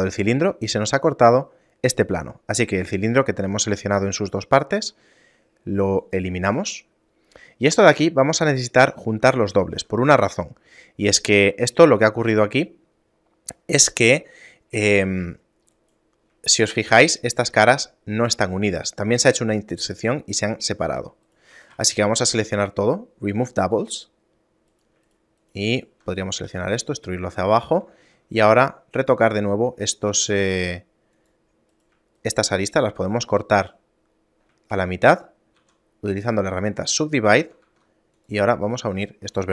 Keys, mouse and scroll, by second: 4.9 x, 7.0 shift+middle click, 8.1-8.6 scroll up 2, 9.5 shift+middle click, 9.5 scroll up 1, 9.9 z, 10.4 shift+middle click, 11.5 scroll up 1, 15.9 right click, 16.7 shift+middle click, 17.3 right click, 17.7 g, 21.1 g, 21.7 a, 21.9 a, 22.5 w, 24.9 right click, 25.3 shift+right click, 26.6 e, 28.1 ctrl+Tab, 30.1 middle click, 30.5 ctrl+Tab, 31.9 right click, 32.4 shift+right click, 33.9 middle click, 34.3-35.1 scroll down 1, 35.7 w, 37.8 ctrl+Tab, 38.9 right click, 39.2 shift+right click.